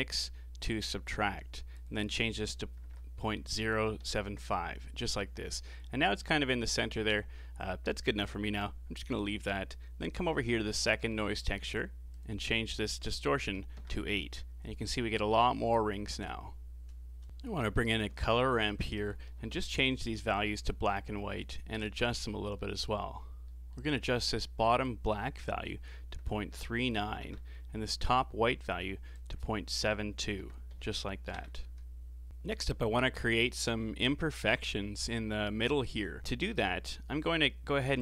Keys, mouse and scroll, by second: 5.5-6.1 scroll down 5, 6.1-9.1 middle drag, 9.4-12.1 middle drag, 12.1-15.2 drag, 17.2 middle click, 17.5 scroll up 4, 17.7-18.1 middle drag, 18.1 shift+a, 19.9 r, 22.0-22.6 scroll up 8, 22.6-24.7 middle drag, 24.7-27.7 drag, 29.1-32.3 drag, 36.2 click, 37.0 middle click, 37.8 shift+a.